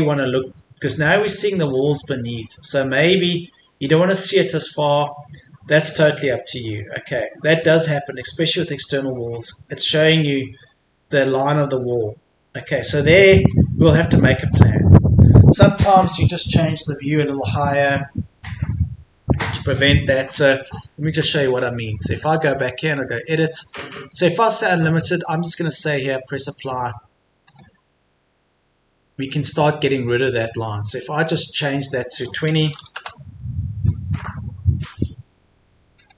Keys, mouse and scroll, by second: 0.4 scroll up 1, 1.3 click, 2.1 Escape, 2.2-2.6 scroll down 1, 2.7 Escape, 3.1 click, 3.7 Escape, 5.1 middle click, 5.6 Escape, 6.0-6.4 scroll up 1, 6.6 scroll down 1, 7.3-8.2 scroll up 1, 8.2 Escape, 8.4 scroll down 1, 8.8 middle click, 9.3-11.3 scroll up 2, 9.5 Escape, 11.3 Escape, 11.9-12.9 scroll down 1, 12.9 click, 13.4 Escape, 20.5-20.8 scroll down 1, 21.2 Escape, 21.5 click, 32.7 KP_2, 36.0 click.